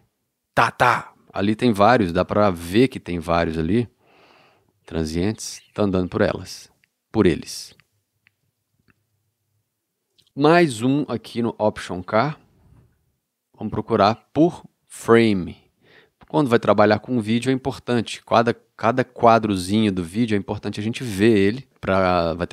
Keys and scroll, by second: 5.9 ctrl+,, 12.3 alt+k.